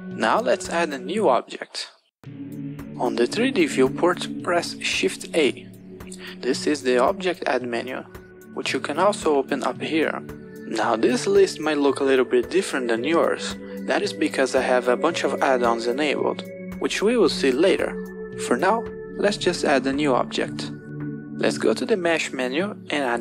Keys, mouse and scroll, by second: 5.4 shift+a, 9.5-10.7 drag, 10.7 shift+a, 14.5 shift+a.